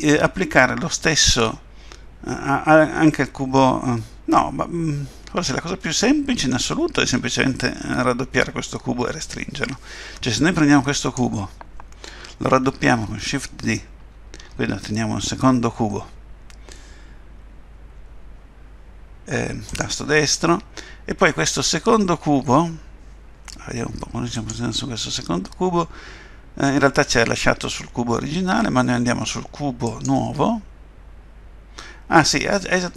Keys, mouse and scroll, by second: 11.0 click, 13.6 shift+d, 24.4 click, 29.9 click.